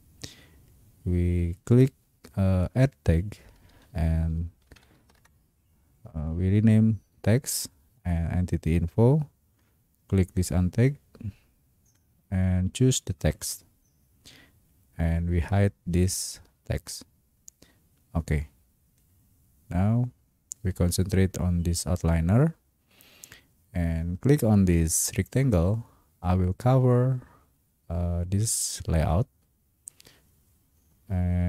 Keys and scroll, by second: 3.9-5.5 typing.